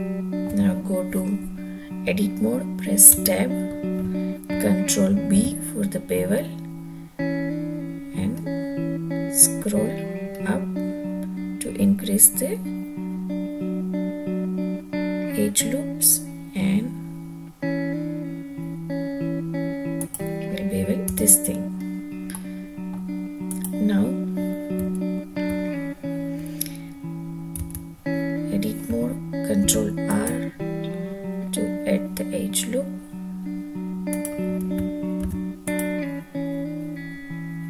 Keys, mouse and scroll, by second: 3.2 Tab, 5.3 ctrl+b, 8.4 scroll up 1, 10.3-11.3 scroll up 1, 20.0 click, 21.1 Tab, 21.8 scroll up 1, 22.3-22.9 middle drag, 23.5 click, 23.5 scroll up 1, 24.9 `, 27.6 Tab, 29.6 ctrl+r, 34.1 click, 35.2 ctrl+r.